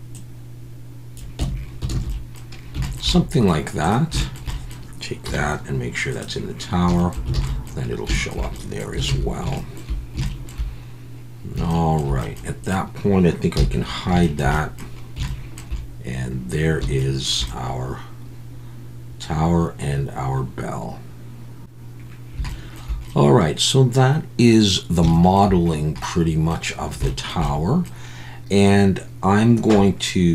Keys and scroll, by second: 1.4 Tab, 2.0 alt+a, 5.2 m, 7.3 alt+a, 9.1 ctrl+s, 13.6 h.